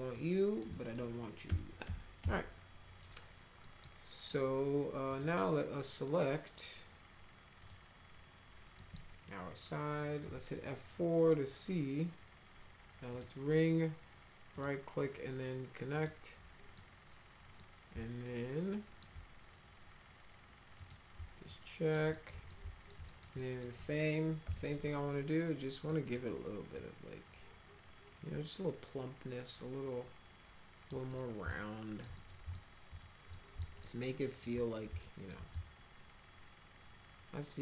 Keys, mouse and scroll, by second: 0.2 alt+middle click, 0.7 middle click, 1.5 F3, 1.8 F3, 2.2 F4, 3.6 middle click, 5.1 click, 7.6 click, 8.8 middle click, 10.2 F4, 13.1 click, 14.5 right click, 16.0 click, 16.8 middle click, 17.5-19.0 middle drag, 20.8 click, 21.5 alt+middle click, 22.1 alt+middle click, 22.5 alt+middle click, 23.0 middle click, 23.4 middle click, 24.4 r, 25.9 middle click, 26.7-30.9 drag, 31.1 middle click, 31.5 alt+middle click, 32.1 middle drag, 32.5 alt+middle click, 33.3 alt+middle click, 33.8 alt+middle click, 35.0 alt+middle click, 35.5-37.6 alt+middle drag.